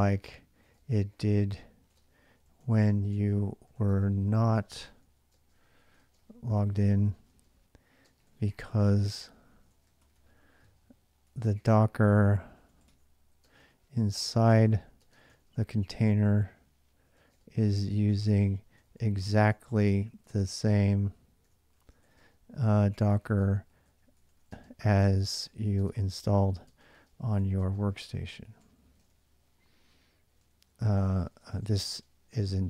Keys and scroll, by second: 0.0-32.6 typing.